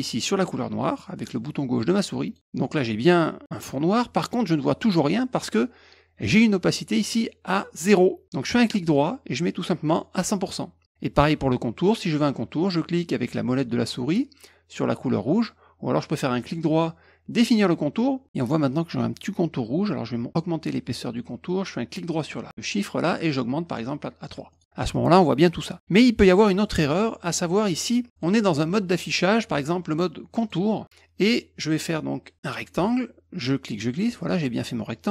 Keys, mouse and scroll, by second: 2.2 click, 8.9 right click, 10.1 click, 16.3 right click, 17.5 click, 22.1 right click, 24.5 click, 28.1 click, 30.3 click, 32.3 click, 33.3 click.